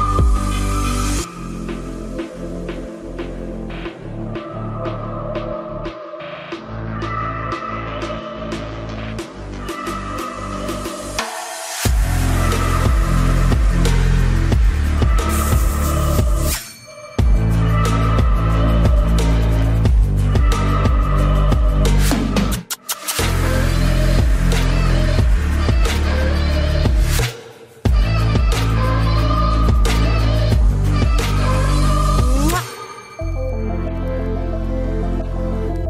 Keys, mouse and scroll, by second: 4.0-5.7 right drag, 5.6 c, 5.7-6.8 middle drag, 9.8 right click, 10.1 ctrl+s, 10.4 middle click, 12.4 c, 13.3-15.0 drag, 13.4-15.9 middle drag, 14.3 c, 17.9-19.3 right drag, 20.1 c, 22.2 KP_Decimal, 23.9 i, 29.5 z, 29.8-31.3 middle drag, 31.3-32.7 drag, 32.9 KP_3, 33.4 z.